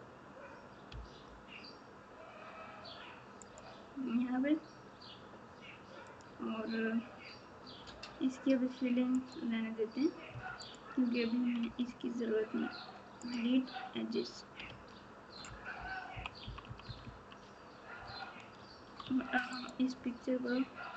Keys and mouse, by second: 0.8 g, 7.8 3, 14.6 alt+z, 16.1-17.0 typing, 19.0 Tab.